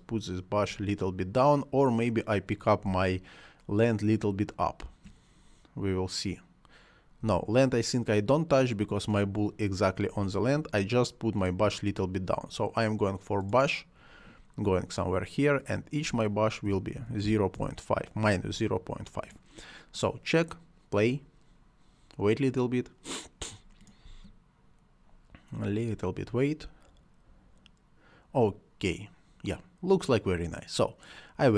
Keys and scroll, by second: 2.7 space, 7.1 space, 10.1 space, 16.3-17.7 typing, 23.9 space.